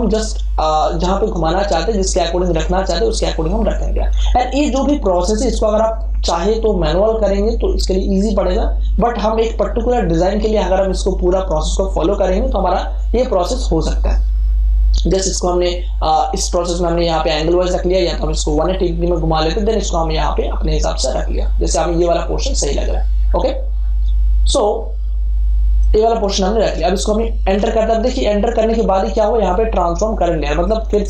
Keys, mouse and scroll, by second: 0.6-10.6 drag, 16.2-17.5 drag, 17.5 right click, 18.5-27.4 drag, 27.4 Return.